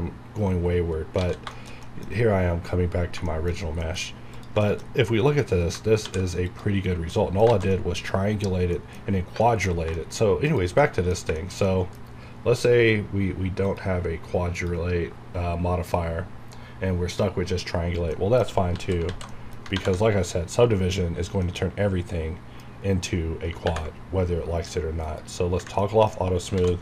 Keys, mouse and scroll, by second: 0.6 scroll down 1, 1.2 scroll down 1, 1.4 alt+a, 1.5 shift+middle click, 1.9 scroll down 1, 3.3 shift+middle click, 3.6 shift+scroll down 1, 3.8 middle click, 4.0 scroll up 1, 4.3 click, 4.6 shift+middle click, 4.8 shift+scroll up 1, 5.7 scroll up 1, 6.5 click, 6.8-7.1 scroll down 1, 7.1 middle click, 7.5 alt+a, 9.9 shift+middle click, 10.5 click, 10.8 middle click, 13.7 click, 18.1 middle click, 18.7 alt+z, 19.3 alt+middle click, 19.8 ctrl+1, 21.4-23.7 middle drag, 23.7 ctrl+`, 25.0 click, 25.8 middle click, 26.1 scroll up 1.